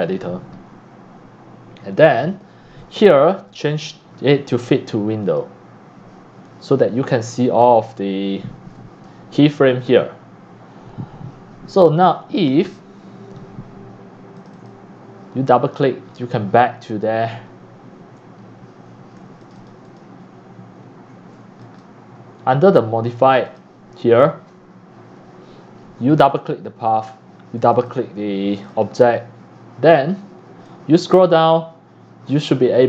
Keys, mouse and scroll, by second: 3.5 click, 5.2 click, 6.0 click, 7.0 click, 7.4 click, 8.1 middle click, 12.7 scroll down 2, 14.4 click, 14.5 click, 15.7-16.6 scroll down 23, 18.4 right click, 18.5-19.2 scroll up 3, 19.2 q, 19.4 click, 19.9 click, 20.3 click, 21.6 click, 22.2-23.0 drag, 23.1 click, 23.5 click, 25.6 click, 26.2 click, 26.4 click, 27.6 click, 28.5 click, 30.6 click.